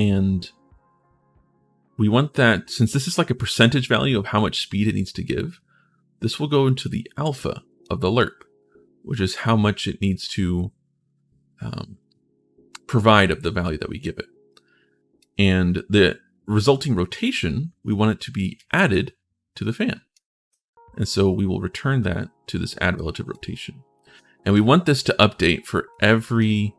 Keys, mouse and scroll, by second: 15.0-16.3 drag, 18.3-19.9 drag, 23.1-24.3 drag, 24.8 click, 25.7 click.